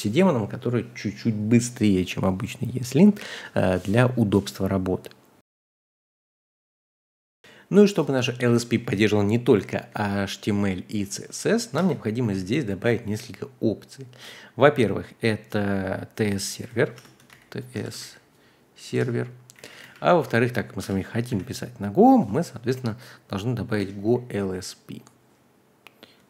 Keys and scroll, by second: 8.8-12.2 typing, 16.9-21.3 typing, 18.9 Return, 23.5-25.0 typing.